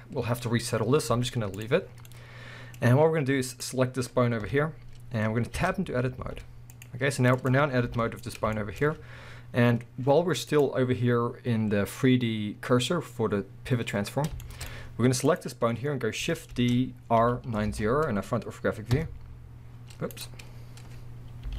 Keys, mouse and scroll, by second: 0.7-1.1 scroll up 1, 1.1 z, 1.9 scroll down 1, 2.3-3.5 middle drag, 2.8-3.5 scroll up 2, 3.5 click, 4.4 KP_1, 5.6 Tab, 6.2 z, 7.4 click, 7.8 g, 8.4 right click, 8.5-10.5 shift+middle drag, 10.5-14.4 drag, 14.4-15.2 shift+middle drag, 14.8 scroll up 1, 15.2 click, 16.5 shift+d, 20.2 right click, 21.4 r.